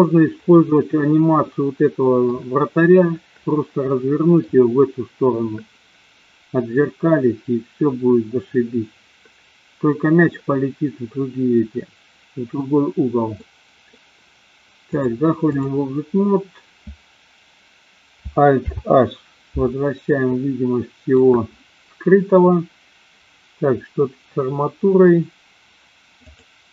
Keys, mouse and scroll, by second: 1.5-2.3 middle drag, 4.0-4.5 middle drag, 13.3 middle click, 15.0-15.7 drag, 18.7 alt+h, 20.3 middle click, 26.2 click.